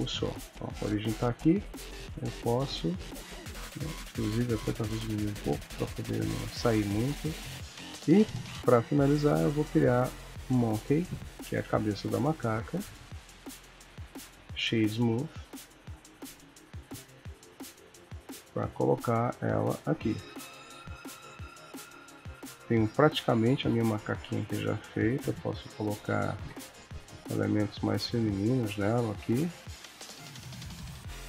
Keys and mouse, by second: 1.2 r, 4.3 g, 5.8 r, 7.7 shift+a, 11.6 g, 13.3 right click, 15.3 middle click, 16.0 KP_3, 17.1 g, 18.3 r, 20.2 KP_1, 21.6 ctrl+middle click, 23.4 click, 24.2 shift+d, 25.3 middle click, 26.3 g, 28.1 s, 29.2 KP_1, 30.7 shift+d.